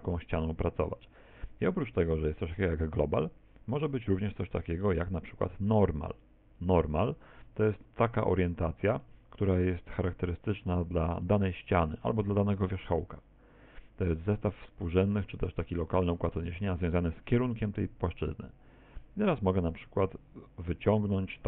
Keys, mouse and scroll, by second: 0.2 middle click, 3.2 click, 8.3 middle click, 11.3 middle click, 12.6 right click, 14.2 middle click, 15.1 right click, 15.7 shift+right click, 16.2 right click, 17.2 middle click.